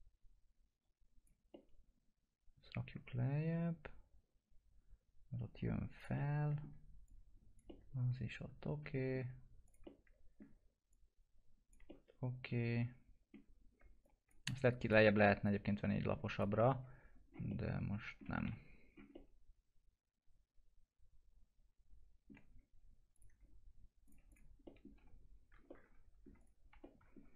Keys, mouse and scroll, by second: 1.4-5.9 alt+middle drag, 5.9 click, 6.1 alt+middle click, 7.0 click, 8.1-9.6 alt+middle drag, 9.6 click, 10.0 alt+middle click, 10.8 click, 11.8 alt+middle click, 14.0 click, 14.5 ctrl+click, 17.1 scroll down 1, 17.4 alt+middle click, 18.4 F4, 18.7-19.0 scroll up 1, 19.4-22.4 alt+middle drag, 22.4-23.1 scroll down 1, 23.1 click, 24.6 middle click, 24.9 F4, 25.6 alt+middle click, 26.3 click, 26.6 F4, 26.7-27.3 middle drag.